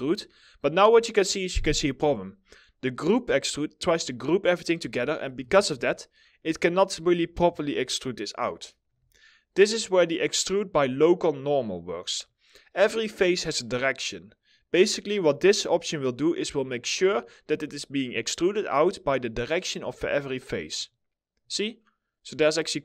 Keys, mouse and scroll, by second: 5.4 alt+middle click, 7.2 alt+middle click, 16.1 middle click, 16.3 scroll down 1, 16.7 alt+middle click.